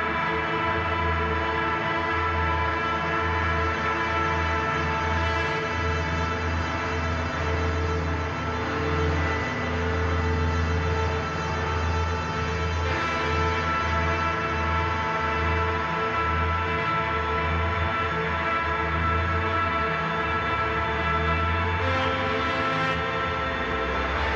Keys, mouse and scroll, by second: 1.0-4.3 drag, 4.3 ctrl+c, 5.2 click, 7.2-8.9 typing, 11.4 ctrl+f, 11.9 click, 13.1 ctrl+z, 13.5 click, 16.8 click, 18.8-22.6 drag, 22.8 click, 23.8-24.3 alt+shift+drag.